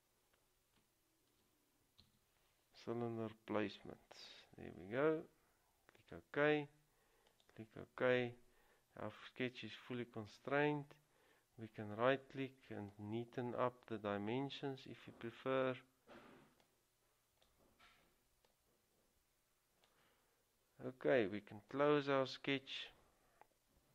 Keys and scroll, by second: 1.5-2.7 typing.